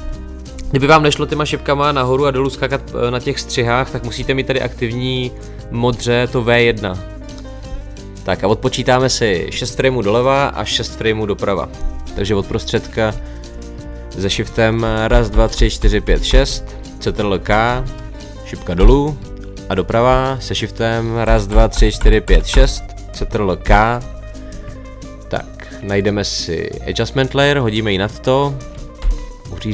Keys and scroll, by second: 17.5 ctrl+k, 18.8 Down, 23.7 ctrl+k.